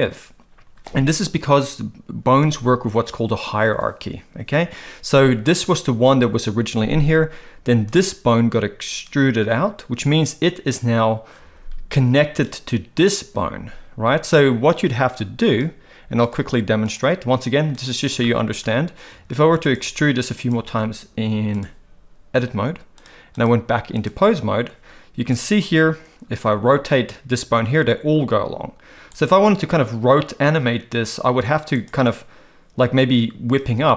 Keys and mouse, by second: 8.0 click, 16.3-16.9 drag, 17.7 click, 18.2 shift+middle click, 19.1 e, 19.8 e, 20.5 e, 23.0 click, 23.3 click, 25.3 click, 27.6 r, 31.8 click.